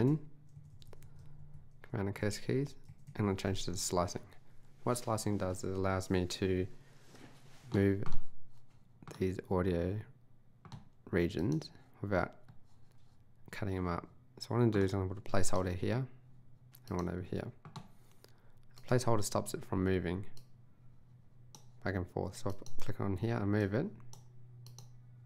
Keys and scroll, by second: 0.1 super+Right, 1.2 super+Down, 2.5 super+Left, 2.9 super+Right.